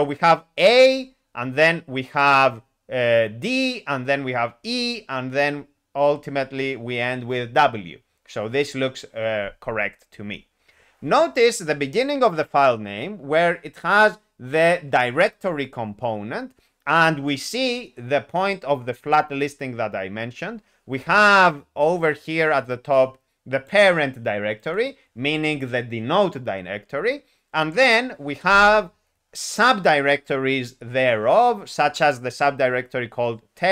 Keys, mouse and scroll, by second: 22.5 click, 23.6 click, 24.7 click.